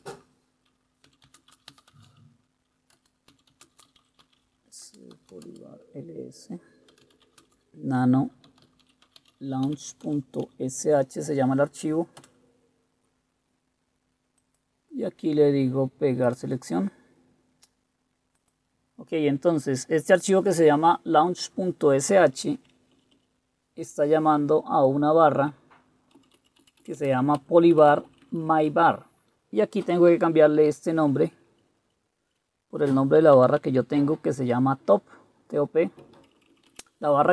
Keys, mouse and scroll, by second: 0.0 super+Return, 0.9-5.7 typing, 3.0 Return, 4.9 Return, 6.8-11.1 typing, 12.3 Return, 23.0 Up, 23.2 Up, 24.1 Left, 24.8 Left, 24.9 Left, 26.2 Left, 26.4 Left, 26.7 Left, 26.9 Left, 27.1 Left, 27.5 Right, 27.7 Right, 27.8 Right, 28.0 Right, 28.2 Right, 28.3 Right, 28.5 Right, 28.7 Right, 31.1 Delete, 31.3 Delete, 31.6 Delete, 31.9 Delete, 32.3 Delete, 33.0-34.2 typing, 36.0 Right, 36.3 Left, 36.5 Left, 36.6 Left, 36.8 Left.